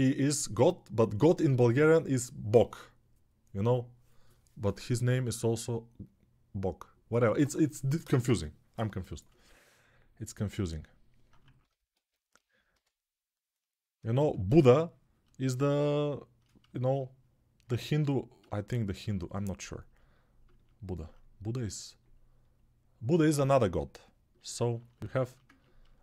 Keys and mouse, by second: 11.2 ctrl+z, 11.7 alt+q, 12.5 g, 20.1 ctrl+alt+right click, 20.8-26.0 drag.